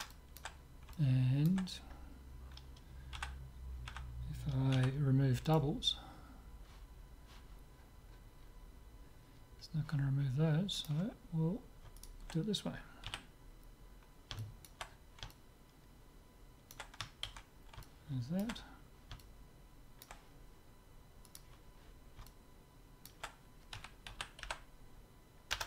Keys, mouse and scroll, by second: 3.2 a, 3.9 a, 4.8 w, 7.8-10.5 middle drag, 10.8-12.6 drag, 12.0-14.1 right drag, 13.1 z, 14.1-17.4 middle drag, 17.4 ctrl+x, 17.9-21.0 middle drag, 21.3-23.0 drag, 22.3 right click, 23.0 middle click, 23.9 s, 24.0 middle click, 24.1 z, 24.6 0, 25.6 Return.